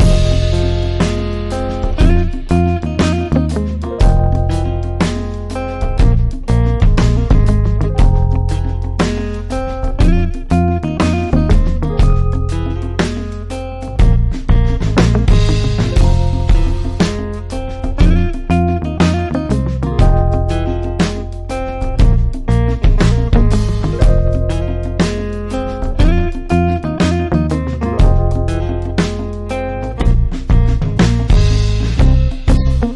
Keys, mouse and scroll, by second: 0.3 click, 3.6-4.4 typing, 3.7 click, 9.2 click, 10.8 right click, 13.2 click, 16.6 click, 22.5 click, 25.0 v, 25.6 click, 30.6-31.3 typing, 30.8-32.9 drag.